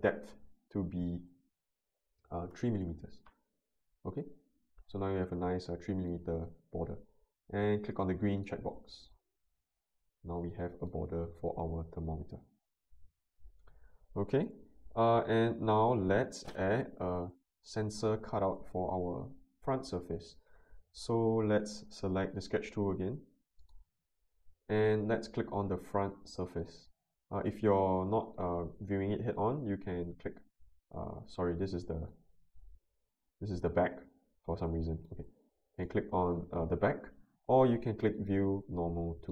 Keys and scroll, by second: 2.5 3, 2.7 Return.